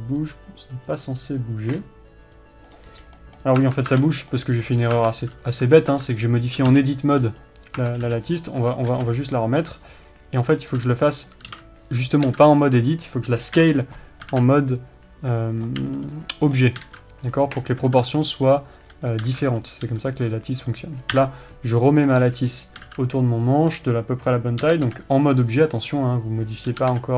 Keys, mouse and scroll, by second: 3.3 right click, 3.7-8.3 middle drag, 4.1 Tab, 5.1-5.5 scroll up 1, 5.5 Tab, 5.8 scroll down 1, 6.4 Tab, 7.0 g, 8.3 Tab, 8.8 x, 10.4 shift+a, 11.1 s, 11.8 click, 12.0 s, 13.4 click, 14.1 KP_3, 14.8 s, 16.2 click, 16.3 g, 17.0 click, 19.8 s, 20.3 click, 20.4 g, 21.7 KP_7, 23.3 s, 24.4 click, 25.2 g.